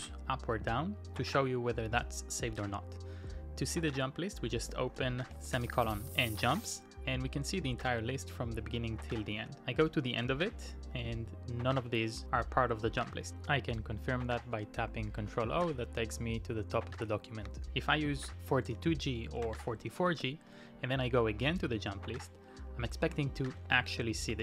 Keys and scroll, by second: 4.6-6.4 typing, 8.3 typing, 9.5 shift+g, 11.6 k, 12.8 j, 14.5 q, 15.6 ctrl+o, 19.1-20.1 typing, 23.6-24.4 typing.